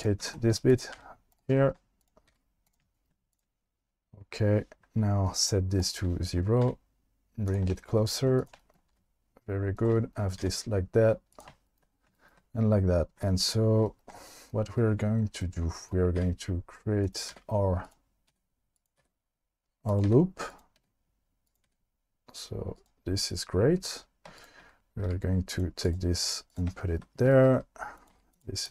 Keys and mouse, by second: 0.2 1, 0.7 click, 0.9 g, 2.3 g, 5.3 click, 5.8 click, 6.6 g, 7.5 click, 8.9 e, 9.8 click, 10.4 e, 16.2 e, 17.0 click, 17.3 e, 18.3 e, 19.0 e, 20.1 e, 20.5 click, 20.8 e, 21.5 click, 21.7 e, 24.4 shift+click, 25.1 g, 25.5 click, 25.9 click, 26.2 g, 28.0 click, 28.1 g, 28.3 click, 28.6 click.